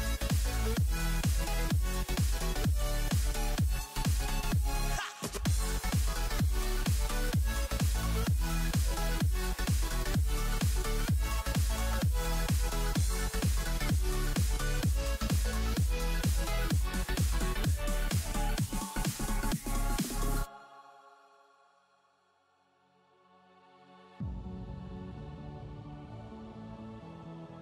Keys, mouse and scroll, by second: 2.0-5.0 drag, 6.1 shift+click, 7.9 click, 18.6 Down, 18.9 Down, 19.7-25.7 drag, 27.5 BackSpace.